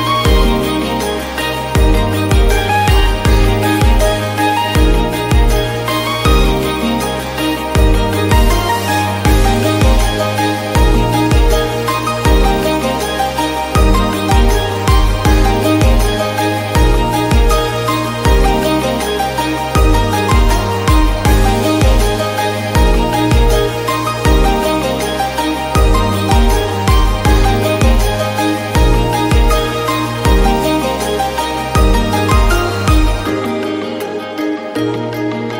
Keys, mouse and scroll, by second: 31.0-32.2 scroll down 1, 32.2-34.9 scroll down 1, 34.9-35.5 scroll down 1.